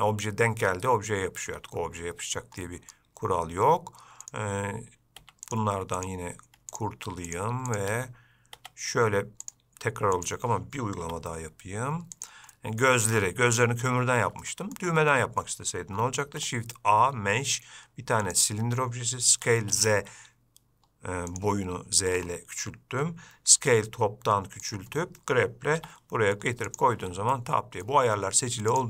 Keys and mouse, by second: 2.9 middle click, 4.5 click, 5.4 x, 6.2 click, 7.5 shift+drag, 8.0 shift+click, 8.8 x, 11.3 g, 12.8 middle click, 13.9 middle click, 14.7-15.0 shift+middle drag, 15.4 middle click, 16.5 shift+a, 19.6 s, 23.8 s, 27.6-28.1 middle drag.